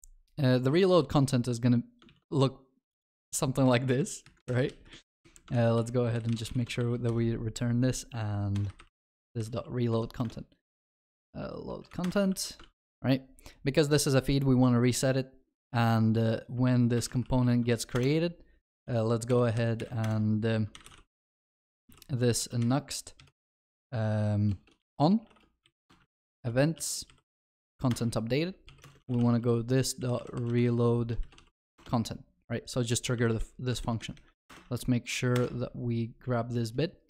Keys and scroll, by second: 2.1 ctrl+x, 4.5 ctrl+v, 4.5 ctrl+y, 10.2 Return, 12.3 ctrl+alt+shift+l, 12.7 ctrl+s, 18.0 Return, 34.5 Return.